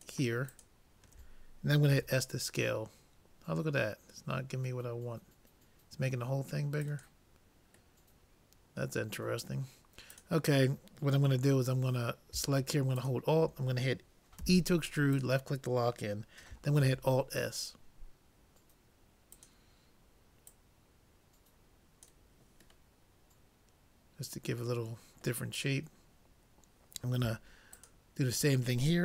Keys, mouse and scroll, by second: 1.9 s, 8.2-9.9 middle drag, 10.2-11.7 drag, 13.1-14.8 drag, 14.4 e, 16.8 alt+s, 20.6-22.2 drag, 22.9-24.6 middle drag, 24.7 middle click, 27.8-29.0 drag.